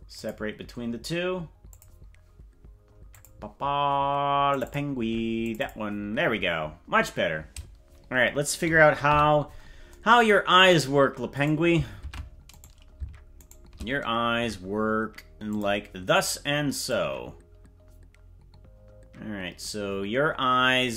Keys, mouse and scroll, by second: 1.6 click, 9.1 KP_Decimal, 11.5 right click, 12.1 ctrl+Tab, 12.7 right click, 13.5 shift+right click, 15.5 click, 16.8-20.9 drag.